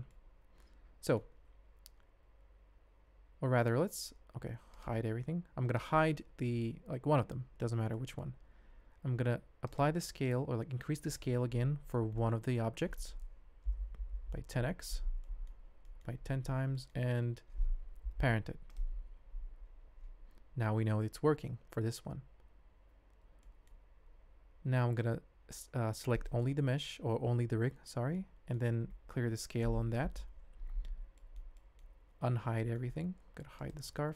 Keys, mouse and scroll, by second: 0.1-1.2 middle drag, 3.6 alt+h, 4.0 alt+a, 4.7 click, 4.9 h, 5.8 click, 7.3 h, 7.9-8.3 middle drag, 9.6 click, 11.0 shift+click, 12.1-12.9 middle drag, 13.5 s, 15.2 shift+middle click, 15.8 shift+middle drag, 16.7 shift+middle click, 18.0 ctrl+p, 23.4 shift+middle click, 24.0 alt+a, 26.2 click, 28.1 shift+middle click, 29.2 alt+s, 30.0 KP_Decimal, 31.2 shift+drag, 31.5 middle click, 32.3 alt+h, 32.6 shift+drag, 33.5 click, 33.9 h.